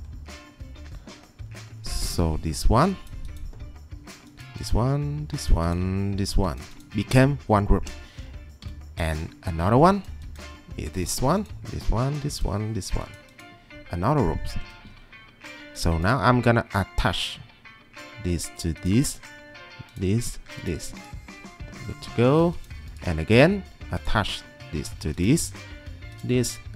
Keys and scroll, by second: 2.0 ctrl+2, 14.6 Escape.